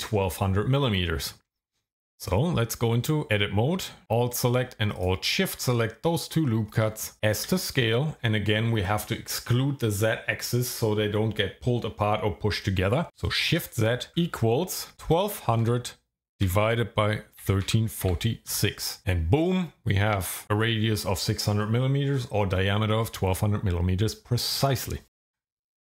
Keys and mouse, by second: 1.9 Tab, 5.0 alt+shift+click, 7.4 s, 13.5-15.6 typing, 17.4 KP_1, 17.6 KP_3, 18.0 KP_4, 18.5 KP_6, 19.0 KP_Enter, 25.1 Tab.